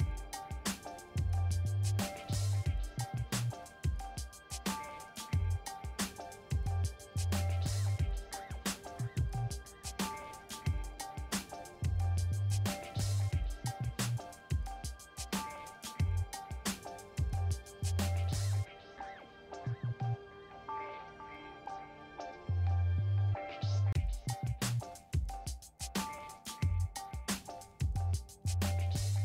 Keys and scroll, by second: 1.9 ctrl+w, 3.1 ctrl+t, 6.7 Return, 17.8-18.7 typing, 18.9 Return, 27.5 3.